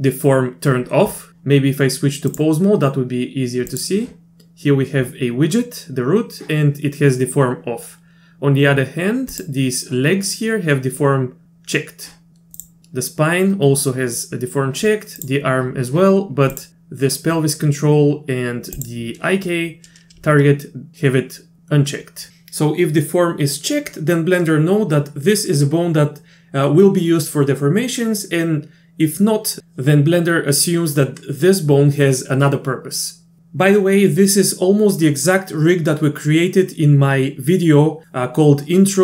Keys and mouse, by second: 2.5-3.8 drag, 9.4 click, 15.2 click, 18.8 click.